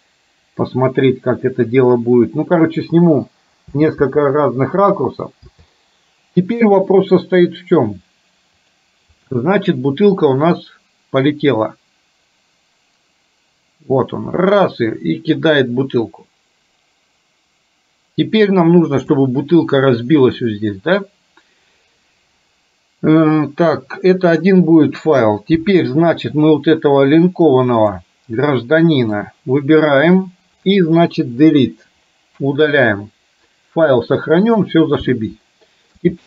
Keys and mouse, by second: 11.6-19.3 drag, 27.9 click, 28.6 middle click, 35.6 shift+middle click.